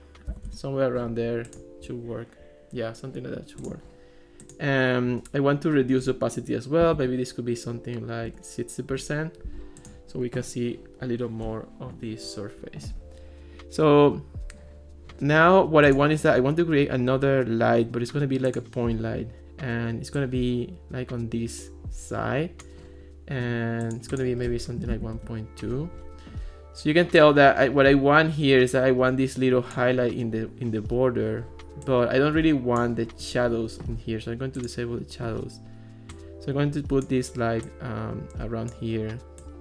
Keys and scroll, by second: 0.3 7, 0.5 Return, 6.9 6, 8.0 0, 8.3 Return, 24.6-25.4 typing.